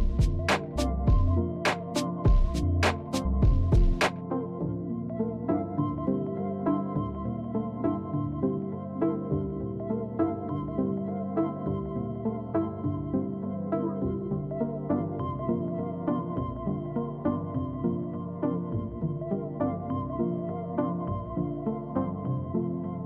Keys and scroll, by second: 0.0-1.3 typing, 14.4 alt+Tab, 18.3 Right, 20.3 Delete, 20.6 Delete, 21.0 Delete, 21.4 Return.